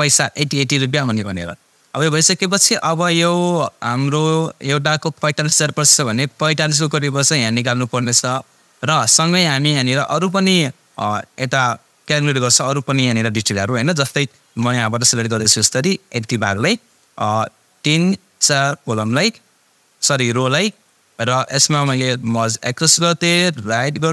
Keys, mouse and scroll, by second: 2.3 click, 8.5-9.1 click, 9.2-9.8 scroll down 1, 9.8-10.9 scroll up 1, 10.9-12.2 drag, 15.2-18.9 drag.